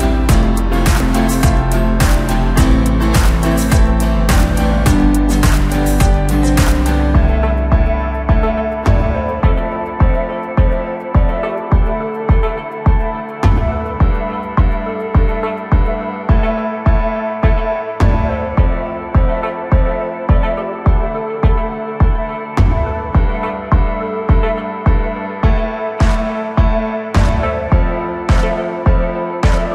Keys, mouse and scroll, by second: 1.1 middle click, 2.0 click, 3.3 a, 4.9-8.0 drag, 9.1 x, 10.2-13.4 middle drag, 13.4 Tab, 14.2 KP_1, 15.6 click, 16.2-17.2 scroll down 1, 17.2-17.6 drag, 17.6-19.4 scroll down 4, 19.4-22.5 drag, 23.5-24.6 middle drag, 24.6 scroll up 1, 24.9 Tab, 25.3 middle click, 26.0-26.6 scroll up 1, 26.6 click, 27.2 click.